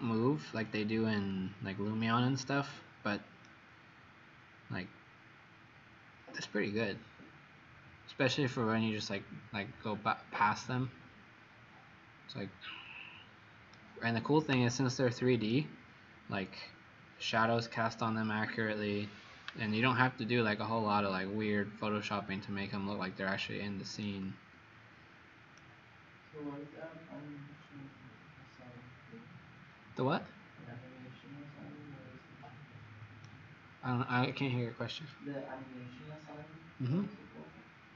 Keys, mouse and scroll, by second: 0.6 scroll down 1, 1.3 click, 3.4 right click.